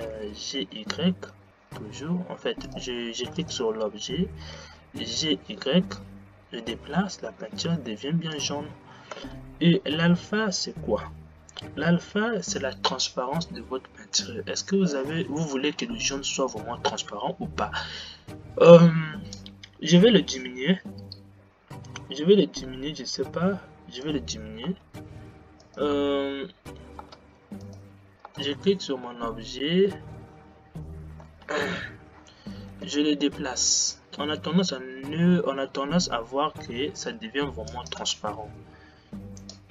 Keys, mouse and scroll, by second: 0.3 g, 3.5 click, 4.7 g, 9.3 space, 19.7-22.5 drag, 24.8 space, 25.7 click, 27.3 space, 27.7 click, 28.4 space, 32.7 g, 38.3 space.